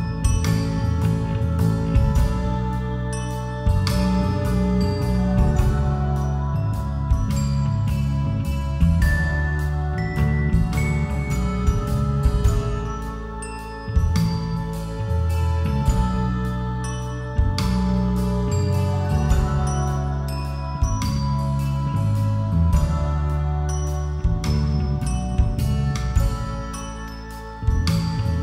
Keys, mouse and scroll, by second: 0.0 Escape, 1.3 click, 2.0-3.6 drag, 3.6 a, 5.6-7.1 drag, 7.9 click, 21.8-24.2 drag, 24.2 middle click, 24.3-28.4 drag.